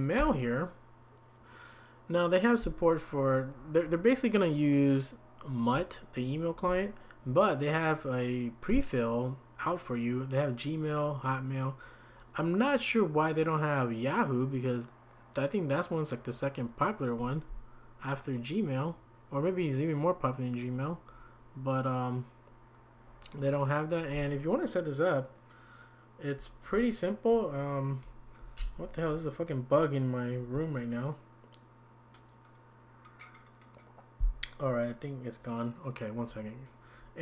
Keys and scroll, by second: 0.2 Return.